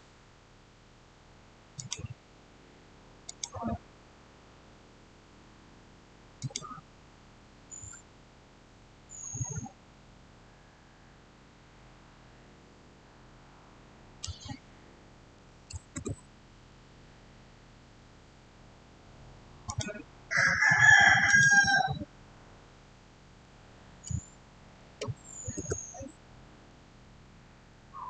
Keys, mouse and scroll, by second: 1.6 click, 6.2 click, 15.2 5, 15.8 Return, 19.5 click, 24.2-25.2 typing, 25.4 Return, 27.1-27.5 scroll up 1.